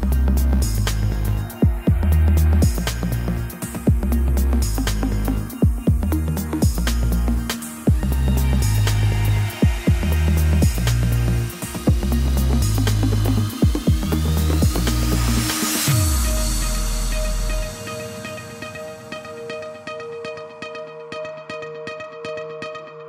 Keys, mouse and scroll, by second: 3.2 y, 3.6 g, 4.1-4.5 scroll down 8, 4.5 shift+middle click, 4.8 g, 5.9 shift+middle click, 6.1-6.5 scroll up 3, 6.5 shift+middle click, 6.7-7.1 scroll up 2, 7.1 k, 13.5 k.